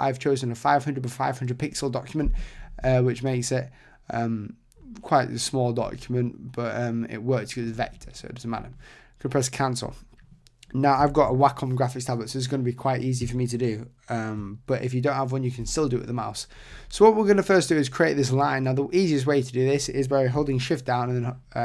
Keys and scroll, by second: 11.1 super+z.